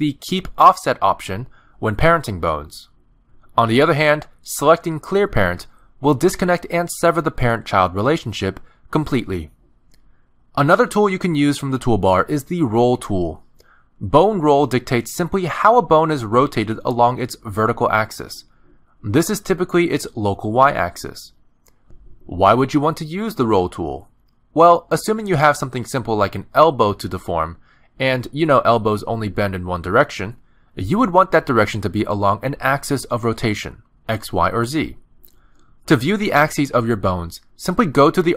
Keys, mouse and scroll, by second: 0.6 click, 1.1 middle click, 1.5 r, 2.9 middle click, 3.5 Tab, 3.8 click, 4.3 click, 4.8 middle click, 7.0 right click, 10.0 middle click, 10.4 Tab, 10.9 click, 11.3 Tab, 13.3 click, 14.9 middle click, 16.2 click, 16.6 scroll up 3, 16.8 shift+middle click, 17.1 middle click, 18.0 click, 22.6 ctrl+z, 23.1 middle click, 23.7 scroll down 1, 23.9 middle click, 25.6 Tab, 25.9 middle click, 26.1 scroll down 1, 26.6 shift+click, 27.4 shift+middle click, 27.9 r, 29.9 click, 30.3 r, 31.8 click, 32.1 r, 33.2 middle click, 35.5 alt+r, 35.7 click, 36.1 alt+r, 36.5 click, 37.0 click, 37.6 alt+r, 37.9 middle click.